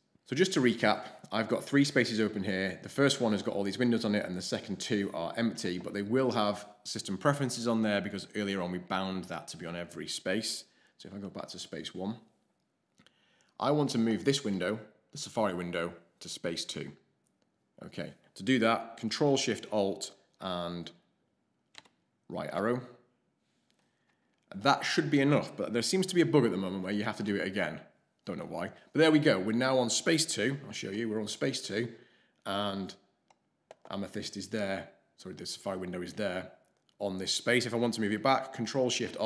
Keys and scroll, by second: 0.7 ctrl+Up, 11.2 ctrl+Left, 11.7 ctrl+Left, 21.7 ctrl+alt+shift+Right, 26.8 ctrl+alt+shift+Right, 27.1 ctrl+alt+shift+Right, 30.8 ctrl+Up.